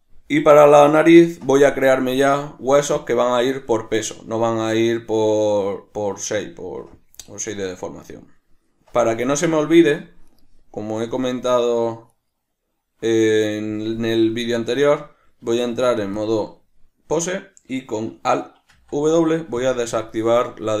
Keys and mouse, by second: 10.3 shift+right click, 11.0 shift+right click, 12.1 shift+right click, 14.3-20.8 shift+middle drag, 15.4 Tab, 18.7 alt+w.